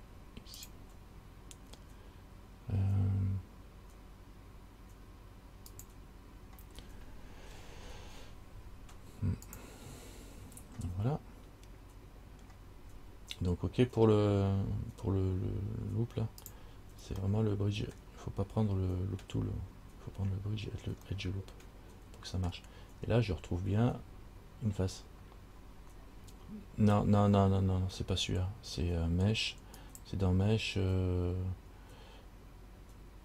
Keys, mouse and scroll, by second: 17.5 middle click, 21.3 middle click, 23.2-24.4 scroll up 4, 30.0 click.